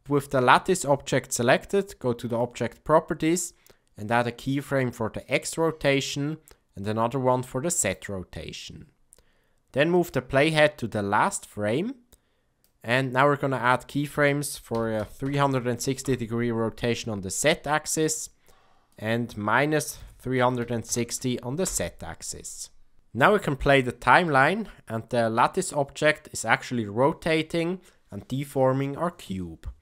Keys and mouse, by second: 5.1 click, 7.8 click, 9.9-12.6 drag, 13.5-16.7 drag, 17.9 click, 19.0-22.5 drag, 24.2 click.